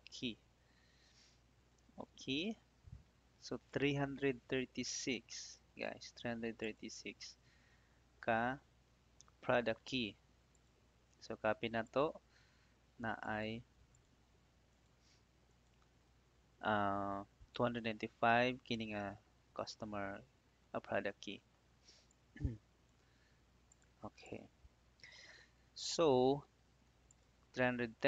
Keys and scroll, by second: 2.3 Return, 8.8 ctrl+d.